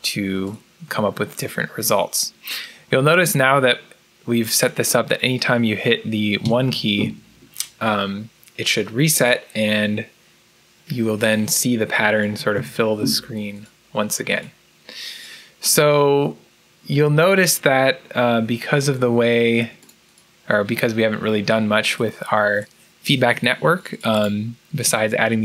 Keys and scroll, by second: 12.5 1.